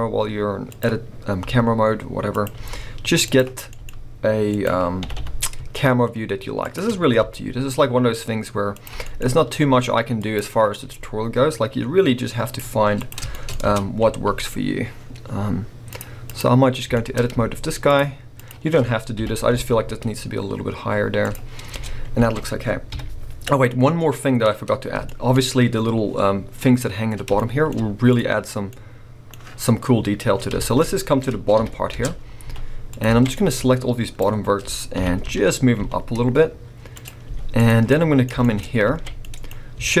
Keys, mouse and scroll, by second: 0.8 click, 1.4 r, 2.4 click, 2.5 g, 3.3 click, 3.6 g, 4.7 click, 5.0 r, 6.7 shift+click, 7.2 g, 8.8 click, 8.9 g, 10.4 click, 10.8 g, 12.9 click, 13.3 shift+middle click, 13.5 scroll up 2, 13.6 Tab, 15.0-15.9 scroll up 2, 15.9 click, 16.3 click, 16.7-17.2 scroll up 2, 16.9 middle click, 17.1 middle click, 17.9 alt+shift+click, 18.4 alt+shift+click, 19.2 g, 21.1 right click, 21.3 click, 21.4 scroll, 21.7 Tab, 22.2 alt+a, 22.9 KP_1, 24.4-25.1 scroll up 2, 25.1-28.1 shift+middle drag, 25.3-26.5 scroll up 2, 26.5-27.3 scroll up 1, 28.1 click, 29.7-30.3 scroll up 1, 30.3 scroll down 1, 30.6-32.0 middle drag, 30.8 scroll up 1, 31.6 KP_1, 32.0 Tab, 32.4 z, 33.1 alt+a, 33.4 click, 35.0 g, 37.0 click, 37.2 z, 37.9 middle click, 38.6 scroll, 38.9 alt+a, 39.2 middle click, 39.6-40.0 scroll up 2.